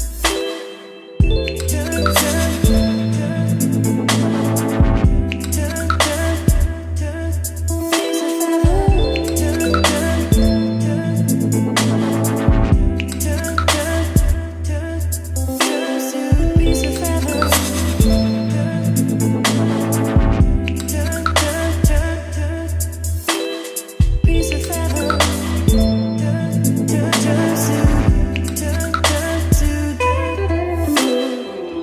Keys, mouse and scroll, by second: 1.5-2.5 typing, 4.0-5.5 typing, 6.4 Down, 6.7 Return, 7.9-9.1 typing, 9.2 Return, 10.4-11.7 typing, 13.1 Return, 14.5 space, 15.3-19.0 middle drag, 15.3-16.8 scroll, 19.0-20.4 typing, 21.1 Down, 21.3 Return, 21.4-25.6 typing, 28.1 b, 28.9 g, 30.1 ctrl+space, 30.2-31.8 typing.